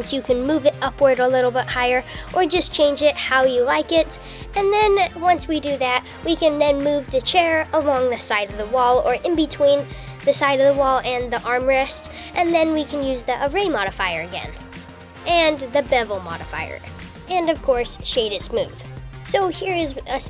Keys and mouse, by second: 1.9 Tab, 3.5 Tab, 3.8 Tab, 4.4 Tab, 4.9 click, 5.1 Tab, 5.7 Tab, 7.4 g, 8.6 Tab, 10.3 KP_7, 16.9-17.6 right drag.